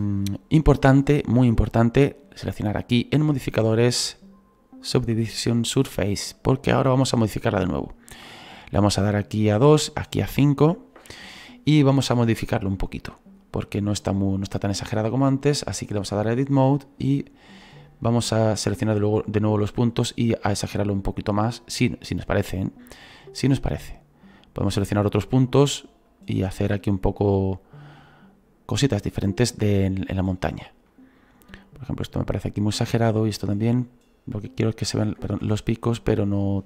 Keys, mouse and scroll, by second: 0.9-2.8 scroll down 1, 2.8-3.8 scroll down 1, 3.8-4.3 scroll down 1, 4.3-4.8 scroll down 1, 5.0-12.2 drag, 12.2-13.4 shift+middle drag, 13.4-14.4 scroll up 2, 14.4-16.3 scroll up 1, 16.3 click, 17.2-18.7 right drag, 18.7 click, 19.0 middle click, 19.9 right click, 21.8 right click, 23.3-24.8 right drag, 25.4 right click, 26.1-27.1 drag, 27.1 right click, 27.7-29.3 right drag, 29.9 right click, 30.9 middle click, 31.7-35.1 right drag, 35.3 ctrl+z, 35.9-36.6 drag.